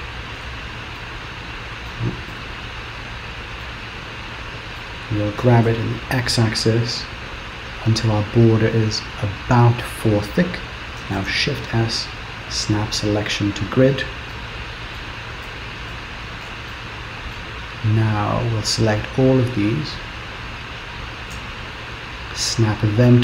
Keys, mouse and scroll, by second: 1.0 middle click, 2.3 KP_7, 3.6 shift+middle click, 5.4 g, 11.2 shift+s, 13.3-14.1 scroll down 4, 14.1 Return, 14.4 middle click, 15.1 Return, 15.5 KP_8, 16.0 KP_7, 16.8 shift+middle click, 18.4 click, 21.5 shift+s.